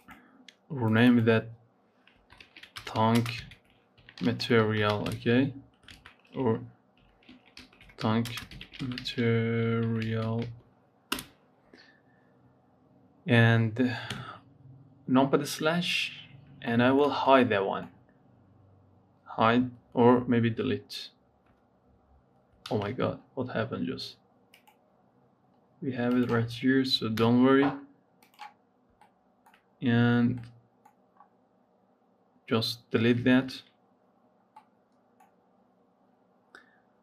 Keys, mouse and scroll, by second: 14.0 KP_Divide, 15.0-15.3 scroll down 3, 15.8-16.1 scroll down 6, 16.5-17.6 shift+middle drag, 17.6 scroll up 4, 21.2 Delete, 22.4 ctrl+z, 24.4 click, 25.9 click, 27.1 Delete, 28.1 click, 29.0 shift+middle click, 29.6-30.2 scroll up 3, 30.2 middle click, 31.1 scroll up 3, 33.1 ctrl+s, 33.7 scroll down 3, 34.6 middle click, 35.3 scroll up 3, 36.4-37.0 scroll down 5.